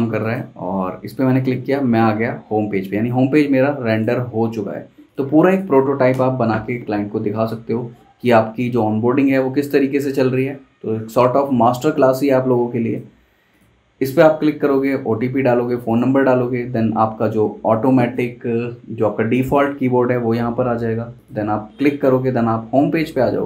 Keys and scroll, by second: 6.1 super+Return.